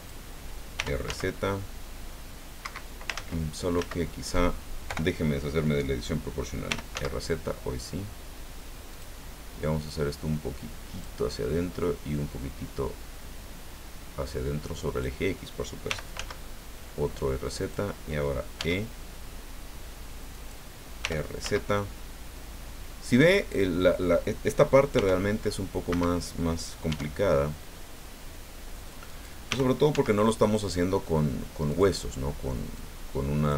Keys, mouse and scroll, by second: 0.0 click, 0.8 r, 1.1 z, 2.6 Escape, 3.1 ctrl+z, 3.9 ctrl+z, 4.9 o, 6.7 r, 6.9 z, 8.9 click, 9.9-11.2 drag, 11.8-15.2 drag, 15.8 r, 16.1 z, 17.6 click, 18.5 e, 20.3 click, 21.0 r, 21.4 z, 23.4 click, 24.9 r, 25.9 Escape, 26.9 e, 29.0 click, 29.5 r, 29.9 z, 31.7 click, 32.7 click.